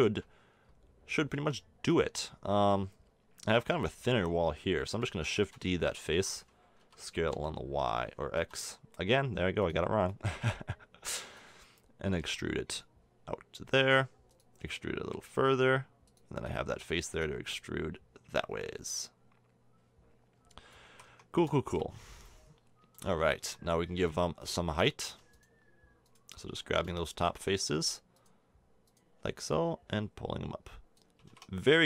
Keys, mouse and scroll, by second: 1.3 Tab, 5.3 shift+d, 6.8 s, 10.1-12.0 drag, 12.2 e, 14.6 e, 16.4-18.1 drag, 16.9 e, 20.8 a, 21.0 Tab, 23.4 Tab, 27.7 ctrl+z, 31.2 a, 31.3 Tab.